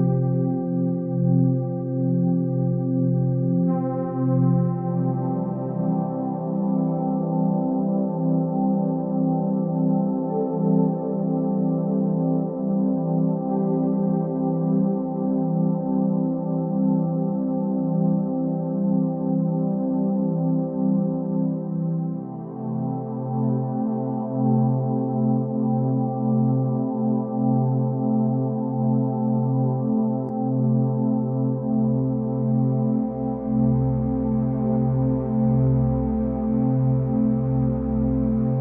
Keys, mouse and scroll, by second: 1.6 KP_0, 4.9-5.6 scroll down 3, 5.6 middle click, 5.9-7.0 scroll down 6, 7.0 click, 7.4 KP_0, 8.4 s, 10.6-11.7 scroll up 2, 11.7-12.7 scroll up 1, 12.7-13.6 scroll up 2, 13.6 click, 15.0 click, 15.7-18.0 drag, 18.0 e, 19.8 click, 22.3-27.0 drag, 27.1-29.7 drag, 33.7 click, 34.4 click, 35.1 shift+click, 35.9 shift+click, 36.5 shift+click, 37.0 shift+click, 37.5 shift+click, 38.5 shift+click.